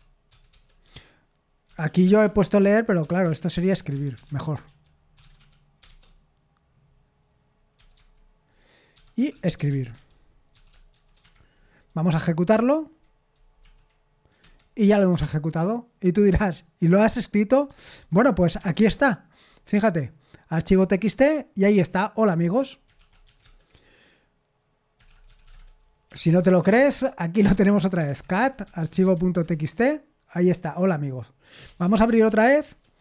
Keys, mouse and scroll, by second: 0.5 typing, 1.6-6.4 typing, 7.8-10.9 typing, 7.9 Tab, 11.2 Escape, 12.5 F4, 13.6 F5, 14.4 Escape, 17.8 ctrl+n, 18.6 k, 20.8 Return, 23.0-23.8 typing, 25.0-29.3 typing, 29.4 Return, 31.3-32.6 typing, 32.6 Return.